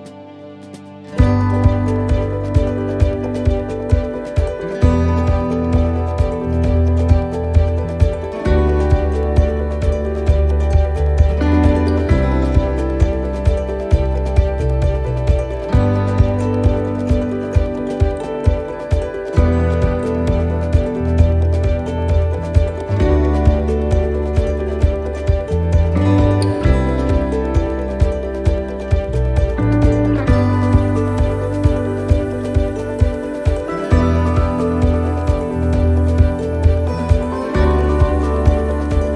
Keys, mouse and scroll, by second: 29.3 shift+middle click, 29.7 shift+middle click, 30.1-30.5 scroll up 2, 30.5 middle click, 30.9 scroll down 2, 31.4 middle click, 32.4 click, 33.4 scroll up 3, 34.2 click, 35.5 right click, 36.3 click, 38.1 right click.